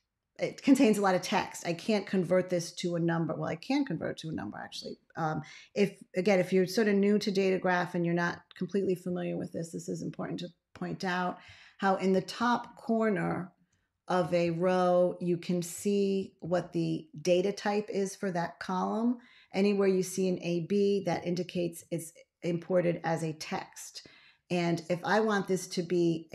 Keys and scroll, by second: 8.9 ctrl+a, 11.3 a, 12.2 ctrl+a, 13.5 a, 14.3 ctrl+a, 16.0 ctrl+a, 16.3 ctrl+a, 21.4 ctrl+x.